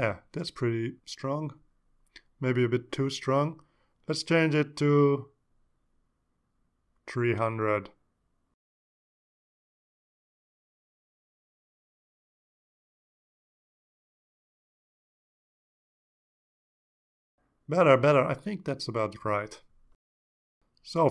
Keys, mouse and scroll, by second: 2.5 click, 4.5 click, 5.4 click, 6.3 click, 6.8 click, 8.4 3, 9.4 Return, 10.9 click, 14.8 click, 15.4-16.0 drag, 16.8 click.